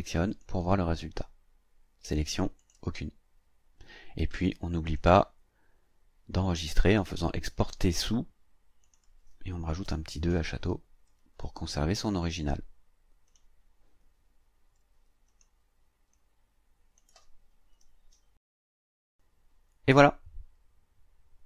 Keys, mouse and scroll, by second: 0.3 click, 2.6 click, 4.8 click, 7.3 click, 8.8 click, 9.8 KP_2, 11.4 click, 13.3 click, 15.3 click, 16.1 click, 17.7 KP_5, 19.0 click.